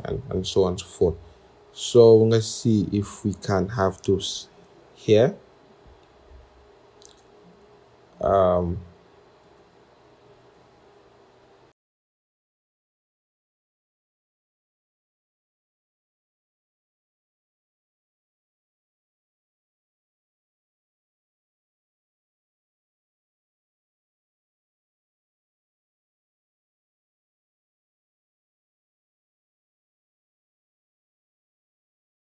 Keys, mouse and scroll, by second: 0.2-3.4 scroll, 4.2 ctrl+=, 5.0 scroll, 8.9 right click, 10.2-11.2 scroll, 11.2-12.2 scroll, 13.2 shift+Up, 13.5 shift+Up, 13.6-14.0 scroll, 15.8 i, 16.8 alt+click, 17.7 i, 18.4 scroll, 20.0 shift+click, 20.6 scroll, 21.0-23.0 typing, 22.2 Caps_Lock, 22.5 Return, 25.7 shift+click, 26.9 alt+click, 27.2 double click, 27.5-29.1 typing, 28.9 Return, 30.2 typing, 31.4 typing, 31.9 scroll.